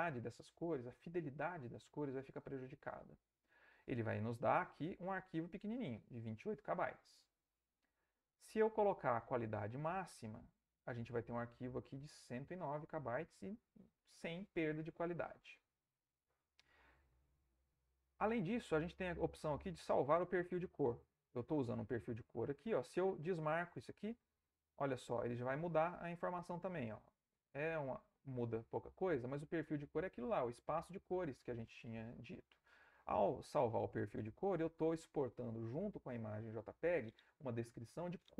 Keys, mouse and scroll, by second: 8.3-10.2 drag, 15.9-17.0 middle drag, 17.0 click, 17.3 ctrl+middle click, 23.0 click, 25.0 click, 27.3 click, 33.7 click.